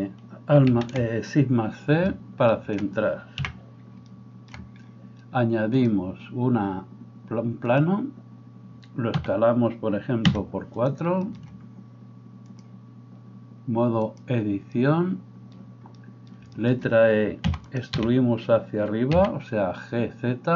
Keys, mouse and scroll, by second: 0.7 shift+c, 2.1-5.7 shift+middle drag, 3.3 n, 5.7-10.9 drag, 6.5-7.8 middle drag, 9.2 s, 10.9-12.6 shift+middle drag, 12.6-17.8 drag, 17.5 e, 17.8-20.5 middle drag, 17.9 g.